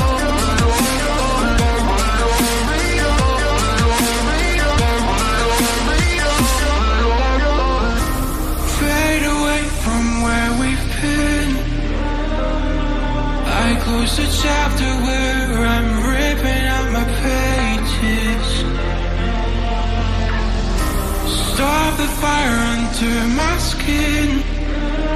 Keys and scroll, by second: 1.5 [, 2.9 Down, 4.4 Down, 8.4 Up, 11.8 Down, 12.4 Down, 22.5 Down.